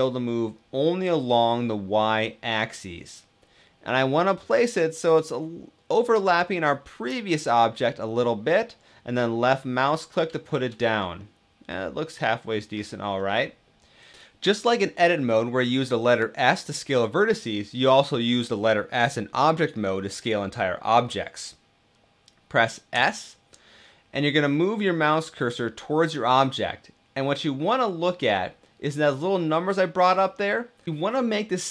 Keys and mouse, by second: 6.8 click, 8.9-9.5 middle drag, 10.2 shift+middle click, 10.9-12.6 middle drag, 13.2 middle click, 22.8 s.